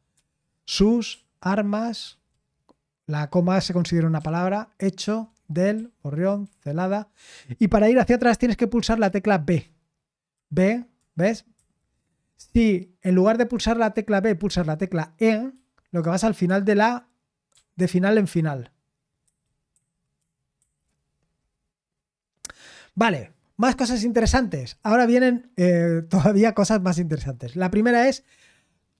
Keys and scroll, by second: 0.0-1.0 typing, 10.3-11.5 typing, 15.5-16.4 typing, 17.5-20.5 typing.